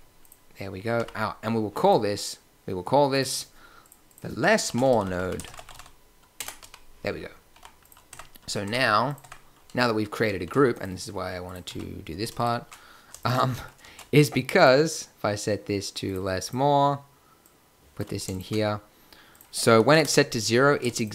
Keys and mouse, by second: 0.9 b, 0.9 n, 5.1 s, 6.5 n, 7.5 g, 8.0 Tab, 9.0 Tab, 9.1 Tab, 10.3 shift+a, 11.6 x, 13.8 shift+a.